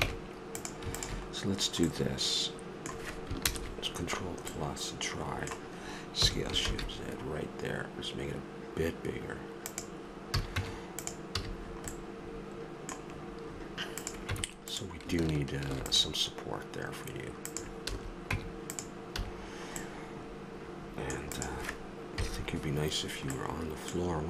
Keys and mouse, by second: 0.0 ctrl+Tab, 1.5-2.5 middle drag, 3.4 ctrl+KP_Add, 6.2 s, 10.3 a, 10.6 Tab, 11.3 a, 11.5 middle click, 11.7 middle click, 14.0 right click, 14.2 Tab, 15.7 ctrl+r, 17.9 a, 18.3 Tab, 19.2 a, 19.5-20.9 middle drag, 22.2 KP_3.